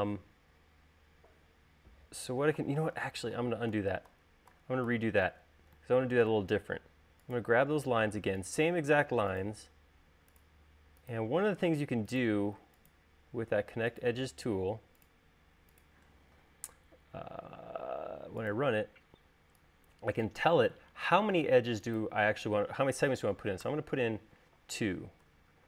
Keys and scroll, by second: 3.5 super+z, 24.2 2.